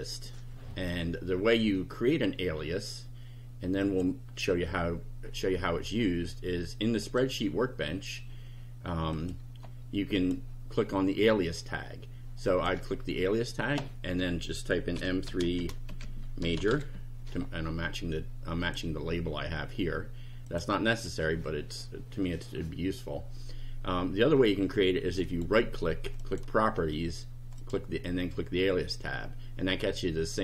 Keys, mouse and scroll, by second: 3.8 click, 7.0 click, 9.1 click, 10.2 click, 12.5 click, 14.7-17.2 typing, 18.6 click, 20.5 click, 20.9 click, 25.2 right click, 26.2 click, 27.6 click.